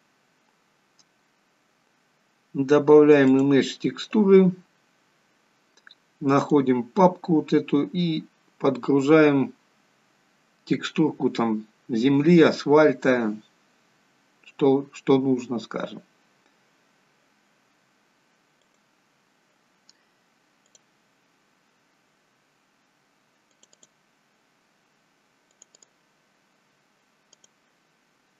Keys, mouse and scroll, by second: 0.9 click, 9.5 click, 18.8 click.